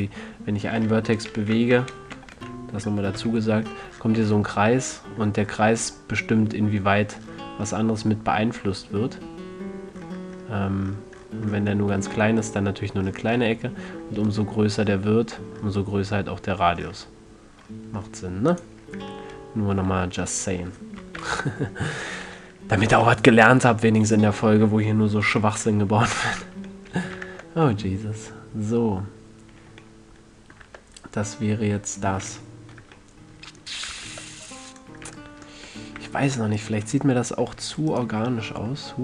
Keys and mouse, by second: 2.7 alt+o, 3.5 g, 19.5-20.7 middle drag, 20.2 a, 21.5 alt+o, 25.7 z, 26.7 a, 27.6 Tab, 31.0 Tab, 34.4 ctrl+Tab, 36.3 a, 36.9-37.5 middle drag.